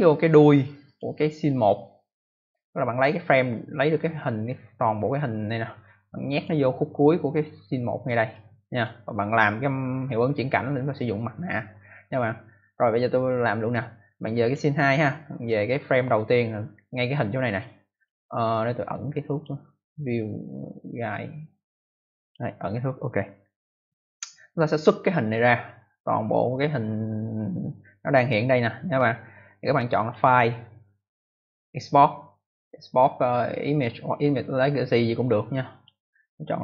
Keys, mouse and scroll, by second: 0.8 click, 6.2 click, 8.2 click, 14.3 click, 15.6 click, 17.9 click, 19.2 click, 22.1 click, 29.9 click, 35.7 click.